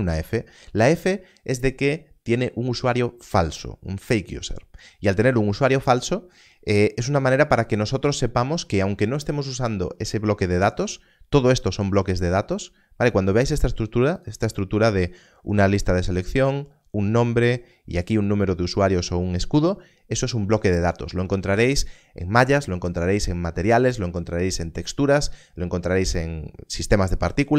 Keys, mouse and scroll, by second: 12.5 click.